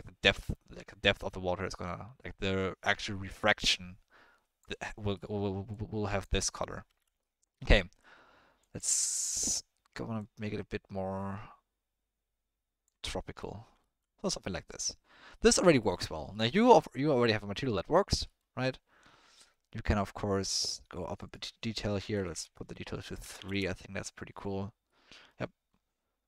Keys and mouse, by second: 5.1 middle drag, 5.7 click, 6.9 ctrl+z, 7.2 middle click, 7.8 ctrl+middle click, 8.6 click, 9.2 click, 13.1 middle drag, 13.8 ctrl+middle drag, 14.2-14.5 middle drag, 15.3 middle click, 16.3 middle drag, 17.7 middle click, 21.1-23.5 drag, 22.3 BackSpace, 24.8-25.3 middle drag.